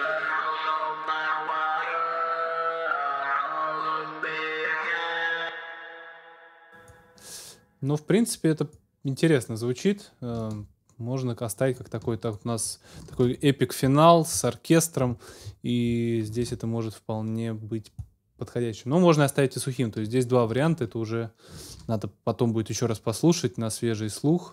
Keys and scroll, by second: 5.2 space, 13.3 super+s, 16.3 super+s, 21.7 super+s.